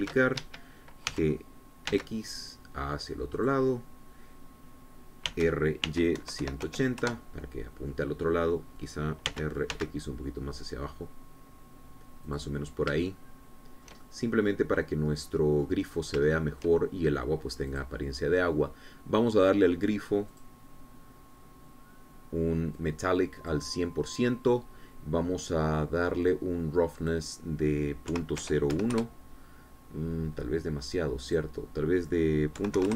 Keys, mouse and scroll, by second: 0.9 shift+d, 1.3 shift+Escape, 2.9 x, 4.3 click, 6.3-7.6 typing, 8.0 KP_Enter, 10.3 r, 10.7 x, 13.2 click, 14.0 shift+click, 14.8-16.8 shift+middle drag, 16.9 scroll up 3, 17.3 shift+click, 18.7 click, 21.3 click, 22.3-23.0 scroll down 1, 23.8 click, 28.0 click, 29.1 KP_Decimal, 29.4 KP_0, 29.7 KP_1, 29.9 KP_Enter, 32.3 click.